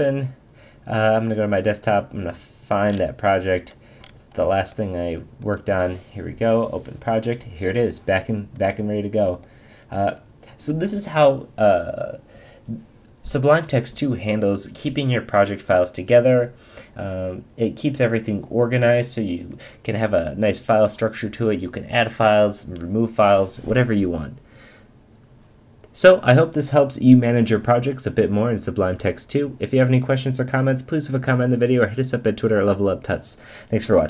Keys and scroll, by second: 6.3 Return.